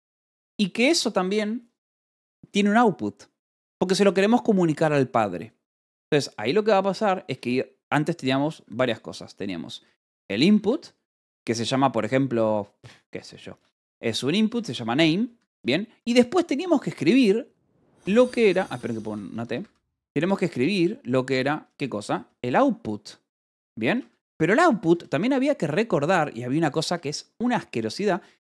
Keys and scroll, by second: 9.1-10.5 typing, 13.7-15.1 typing, 15.8 ctrl+g, 15.9 Escape, 16.4 o, 18.4 Escape, 18.5-20.5 typing, 22.2 o, 22.5 t, 23.5-24.7 typing, 25.9 shift+9, 26.6 shift+0, 26.9 space, 28.1-28.5 typing.